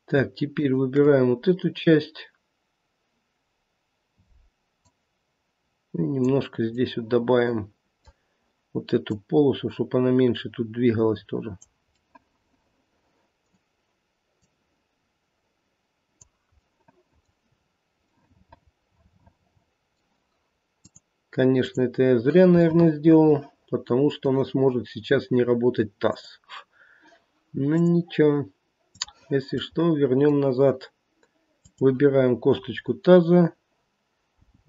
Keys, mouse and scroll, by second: 0.5 shift+click, 4.8 click, 6.7 middle click, 7.3 middle click, 8.0 middle click, 9.1 click, 11.8 middle click, 13.3 middle click, 14.4 click, 16.6 middle click, 18.1 middle click, 18.2 middle click, 18.5 middle click, 20.8 click, 22.6 middle click, 22.9 middle click, 23.3 middle click, 23.5 middle click, 26.0 click, 27.7 click, 29.8 middle click, 30.0 middle click, 31.6 click, 34.4 g.